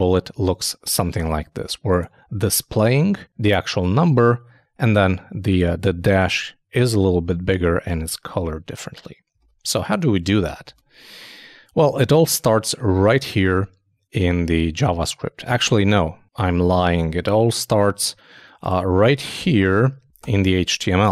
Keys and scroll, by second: 9.4 super+i, 10.6 super+Tab, 19.4 super+[.